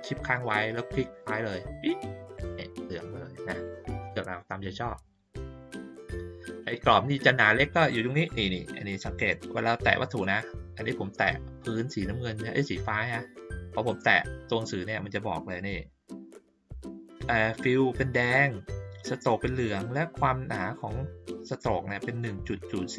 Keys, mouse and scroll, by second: 1.7 shift+click, 10.2 click, 13.8 click.